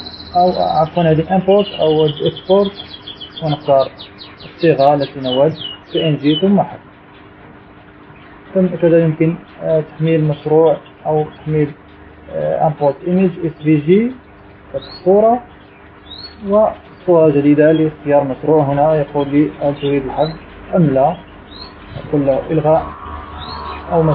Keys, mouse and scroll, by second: 0.3 click, 3.9 click, 5.3 click, 7.2 click, 8.3 click, 9.7 click, 18.9 click, 23.6 click.